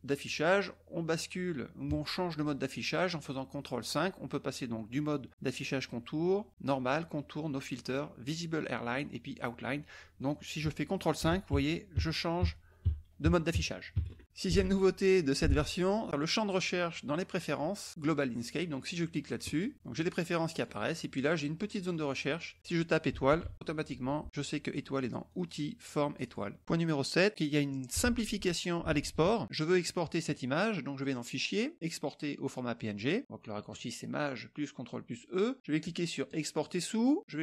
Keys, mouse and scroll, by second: 10.3 click, 11.5 ctrl+KP_5, 19.4 click, 20.0 click, 21.9 click, 23.2-24.0 typing, 25.3-26.4 drag, 29.8 click, 31.1 click, 32.8 click, 36.3 click.